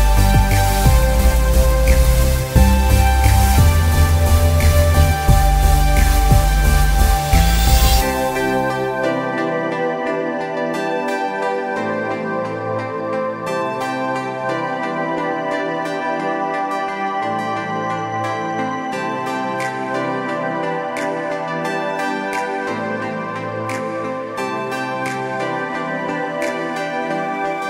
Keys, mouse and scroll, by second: 0.9 click, 2.3 click, 4.9 scroll down 1, 6.9 alt+scroll down 1, 8.1 space, 8.3 click, 8.6 space, 10.1-10.8 scroll up 1, 12.1 click.